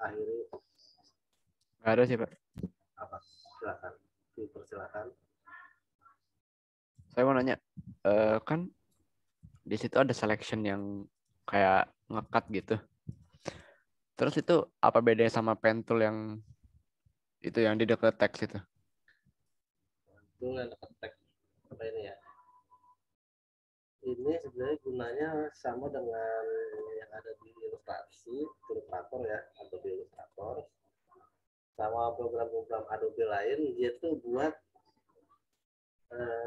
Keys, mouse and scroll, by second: 24.1 click, 25.0 right click, 26.7 click, 30.2 right click, 33.8 click.